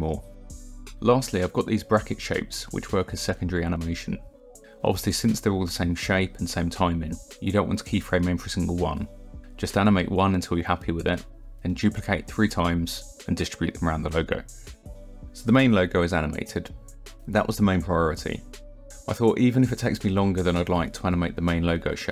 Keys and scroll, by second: 0.9 KP_0, 2.8 KP_0, 6.5 ctrl+d, 7.2 r, 8.2 KP_9, 8.4 Return, 9.5 ctrl+d, 9.8 r, 10.6 KP_1, 10.8 KP_8, 10.9 Return, 11.7 ctrl+d, 12.0 r, 12.8 KP_2, 13.0 KP_0, 13.3 Return.